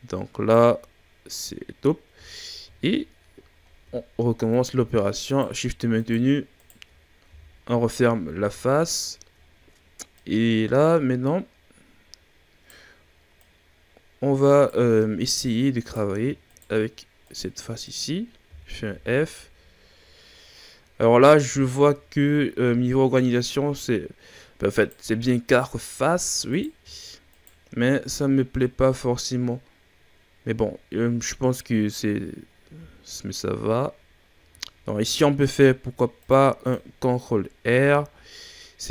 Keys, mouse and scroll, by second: 0.7-1.3 scroll down 5, 1.3-2.3 scroll up 4, 2.3-2.6 ctrl+scroll up 5, 2.6 shift+scroll down 2, 2.8-3.4 shift+scroll up 3, 3.4-3.9 scroll down 2, 3.9-4.4 shift+scroll up 5, 4.4 right click, 5.2 shift+right click, 5.9 shift+right click, 6.5 shift+right click, 7.3 f, 8.1-9.4 ctrl+scroll down 10, 9.4-10.2 scroll up 2, 10.2 right click, 13.4 right click, 15.8 right drag, 16.4 shift+right click, 17.2 shift+right drag, 17.8 shift+right click, 18.5 f, 18.9 a, 19.0-20.4 scroll down 8, 20.4-21.1 scroll up 5, 21.3-21.6 scroll down 3, 21.6-24.7 shift+scroll up 7, 24.7 right drag, 25.8-26.4 shift+scroll down 6, 26.4 right click, 27.3 shift+right click, 27.9-28.2 scroll down 6, 29.6-30.4 scroll up 2, 30.4-31.2 scroll up 5, 31.2-31.8 scroll down 5, 32.6 scroll up 1, 32.8 a, 33.3-33.9 scroll down 3, 33.9-34.3 shift+scroll up 6, 34.3 a, 34.9 ctrl+r, 36.9-37.8 scroll down 7, 37.8 a, 38.4-38.9 scroll up 3.